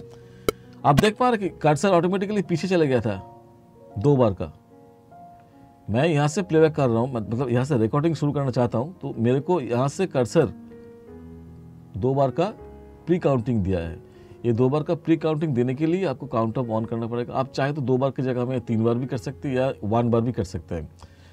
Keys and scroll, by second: 1.1 space.